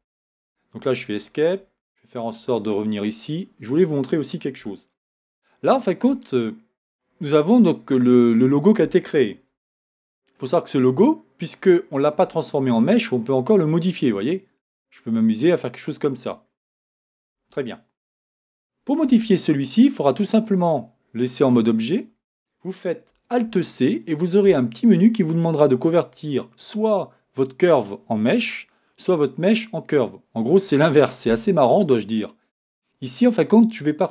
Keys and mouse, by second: 0.0 Escape, 5.0 shift+z, 9.6 Tab, 13.2-14.5 right drag, 17.2 super+z, 19.0 Tab, 23.4 alt+c.